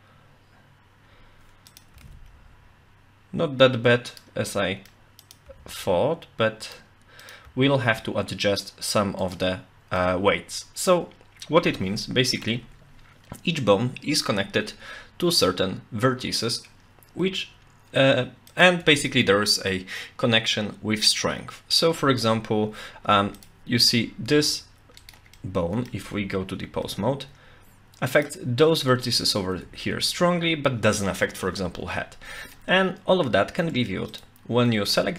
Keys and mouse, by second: 1.7 click, 1.7 r, 1.9 r, 4.1 right click, 4.5-4.9 middle drag, 5.5 r, 6.7 right click, 7.2 click, 7.4 r, 9.2 right click, 10.0-10.9 middle drag, 12.0-12.5 shift+middle drag, 18.5 click, 18.9 Tab, 23.1 Tab, 23.8 Tab, 24.2 r, 25.4 middle click, 26.0 Tab, 26.8 r, 28.2 click, 29.6 ctrl+z, 31.9-32.6 middle drag, 33.6 Tab, 34.1 click, 34.9 Tab.